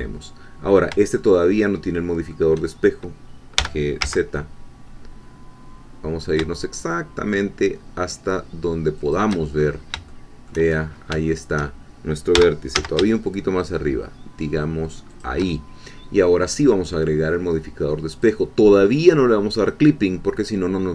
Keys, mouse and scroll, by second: 1.2-2.6 shift+middle drag, 3.6 g, 4.0 z, 9.0 shift+click, 9.6-10.0 shift+scroll up 1, 10.1 shift+click, 10.8-11.1 shift+scroll up 1, 11.3 shift+middle click, 12.3 g, 12.7 z, 15.1 shift+click, 16.4 click, 18.1 click.